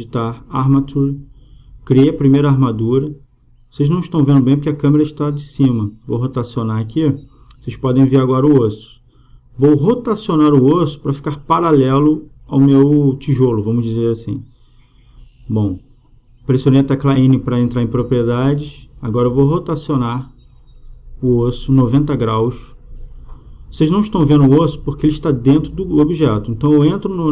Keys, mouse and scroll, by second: 3.1-12.8 middle drag, 12.8 n, 16.0-18.5 middle drag, 18.5-20.4 drag, 24.5 n, 26.9-27.3 drag.